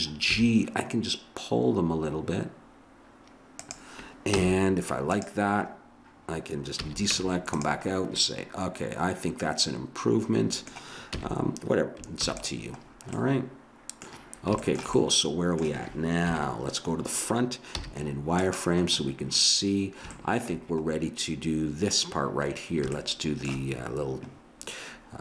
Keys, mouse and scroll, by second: 0.3 g, 4.4 z, 6.7 a, 7.1 Tab, 8.2 middle click, 8.7 middle click, 11.1 a, 12.1 ctrl+s, 16.3 KP_1, 17.7 z, 23.2 middle click, 24.5 middle click.